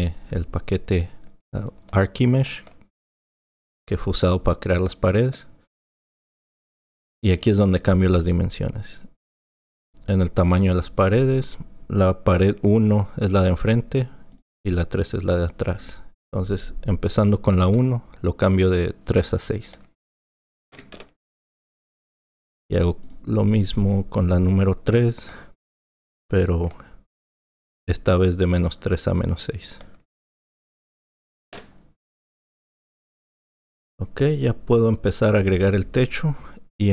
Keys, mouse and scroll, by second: 9.3-12.5 drag, 15.8-19.0 drag, 23.0-26.2 drag, 33.7 click.